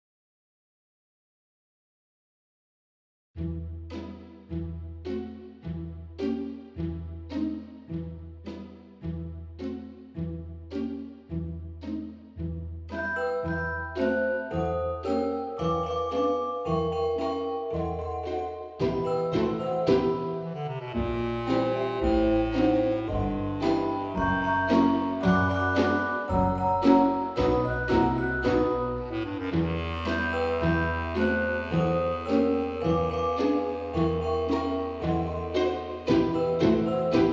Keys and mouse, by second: 0.0 z, 0.5 click, 1.1 p, 1.4 click, 2.0 Tab, 2.5 click, 2.9 middle click, 3.5 Tab, 4.4 ctrl+r, 4.9 click, 5.4 right click, 5.6 middle click, 6.4 ctrl+r, 6.7 click, 7.0 right click, 7.8 ctrl+r, 11.1 click, 11.5 right click, 12.0 middle click, 13.4 F5, 14.0 middle click, 15.6 ctrl+r, 17.5 click, 17.9 right click, 18.3 middle click, 20.3 click, 20.9 middle click, 21.6 F5, 22.7 Tab, 24.9 click, 25.8 shift+middle click, 26.4 click, 28.0 x, 28.8 click, 29.2 Tab, 29.5 middle click, 30.8 click, 33.1 click, 35.0 click, 36.9 F5.